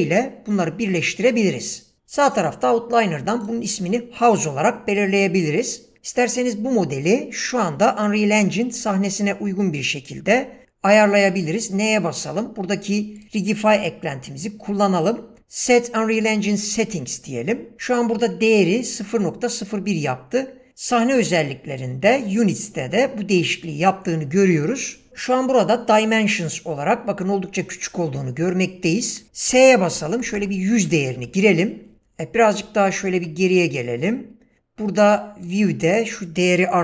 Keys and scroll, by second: 2.0 BackSpace, 11.2 n, 29.3-30.9 typing.